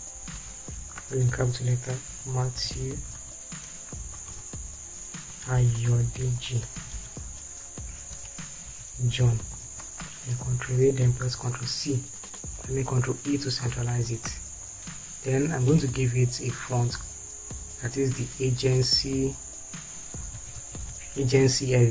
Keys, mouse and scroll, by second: 2.2-7.2 typing, 8.3 Return, 8.9 shift+j, 9.1 shift+o, 9.4 shift+h, 9.7 shift+n, 10.6 ctrl+a, 11.6 ctrl+c, 13.0 ctrl+e, 14.3 ctrl+space, 20.4 a.